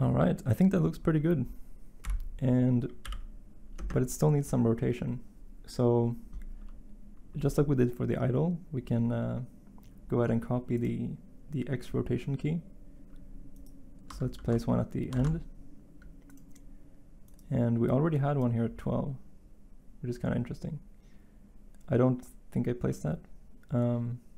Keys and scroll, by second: 2.0 Page_Down, 3.0 Page_Up, 15.1 d.